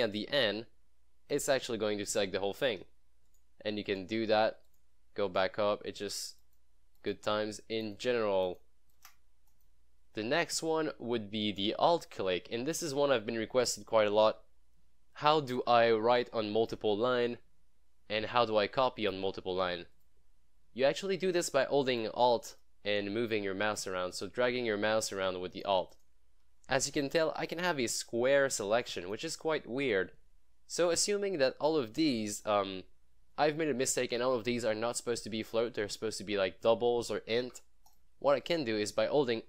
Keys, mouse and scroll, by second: 1.4 click, 9.5 shift+click, 14.2-14.7 scroll up 1, 14.9 scroll up 1, 15.6 scroll up 1, 16.1 scroll up 1, 17.1 scroll down 1, 18.8 scroll down 1, 20.0 click, 23.0-25.8 alt+drag, 27.8-29.0 alt+drag, 29.4 scroll up 2, 30.6 scroll down 1, 31.8-32.3 click, 35.7 click, 37.9 click.